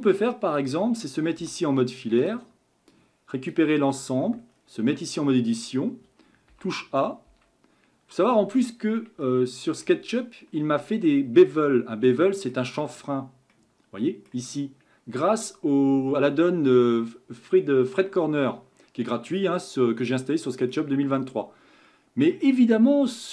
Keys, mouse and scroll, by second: 0.2-1.4 middle drag, 1.4 z, 2.9 click, 3.9 scroll up 5, 4.5 scroll down 1, 4.9 Tab, 5.4-6.5 shift+middle drag, 6.5 a, 7.3 a, 8.2-9.2 scroll up 5, 9.2 shift+middle click, 10.1-10.9 scroll up 9, 11.2-11.6 scroll down 2, 11.6-13.0 middle drag, 13.0-13.5 scroll down 1, 13.5-16.7 middle drag, 19.6-20.1 scroll down 2, 20.1-21.2 middle drag, 21.2-21.5 scroll down 3, 21.9-23.3 middle drag.